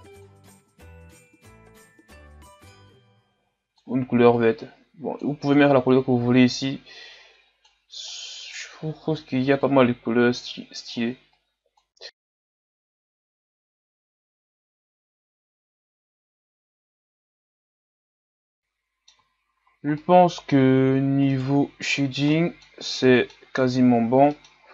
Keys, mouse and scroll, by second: 12.6 scroll down 1, 12.7 middle click, 13.2 click, 13.6-14.0 scroll up 3, 14.0 click, 15.3 a, 15.5 middle click, 15.8 scroll up 2, 16.0 right click, 16.4 click, 17.1 click, 18.3 a, 18.4 scroll down 4, 18.4-19.5 middle drag, 19.5-19.9 scroll down 3, 19.9-21.3 middle drag, 21.3-24.7 right drag.